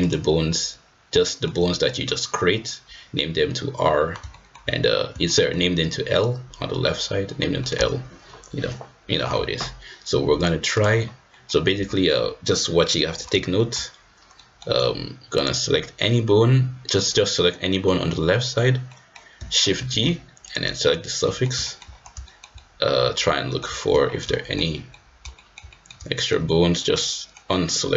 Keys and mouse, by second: 0.0-1.1 drag, 1.2 shift+middle drag, 1.8 click, 4.3 shift+middle drag, 5.2 shift+middle click, 7.6 middle drag, 10.3-10.8 drag, 11.3 middle click, 13.6 shift+middle click, 14.3 middle click, 15.3 click, 17.7 middle click, 18.8 middle click, 19.7 shift+g, 21.2 click, 21.6 shift+click, 22.2 shift+click, 22.5-23.6 middle drag, 24.3 shift+middle click, 24.8 middle click, 25.3 shift+middle click, 25.6 middle click, 26.1 shift+middle click, 26.9 middle click, 27.5 middle click.